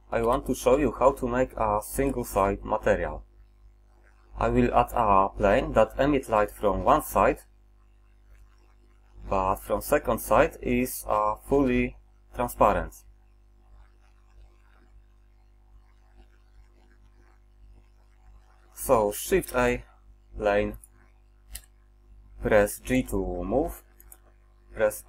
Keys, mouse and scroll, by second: 0.3 n, 1.1 middle drag, 1.3 middle click, 2.1 shift+z, 13.9-15.8 middle drag, 16.2 middle drag, 16.6-17.2 middle drag, 17.9-18.6 middle drag, 19.6 shift+a, 21.6 KP_1, 23.0 g.